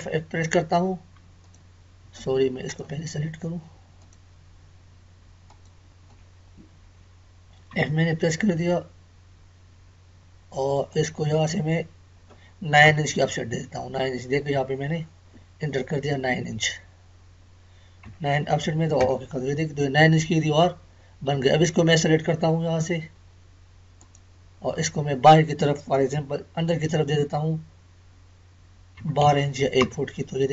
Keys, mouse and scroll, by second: 1.4 click, 2.0 Escape, 2.6 click, 4.8 Escape, 5.4 click, 6.2 Escape, 10.9 click, 23.9 click.